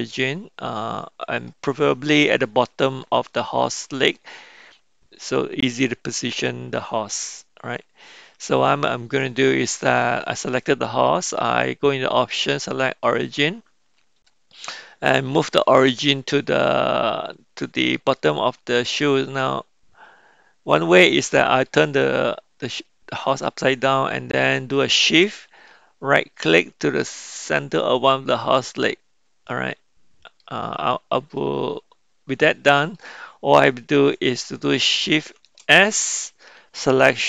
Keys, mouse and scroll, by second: 2.2-3.1 middle drag, 3.3-4.2 middle drag, 4.7-8.4 middle drag, 11.6-13.6 drag, 17.3-18.6 middle drag, 18.8-21.6 middle drag, 23.4 middle click, 28.1 shift+right click, 29.4-30.4 middle drag, 31.4-32.9 middle drag, 35.3 shift+s.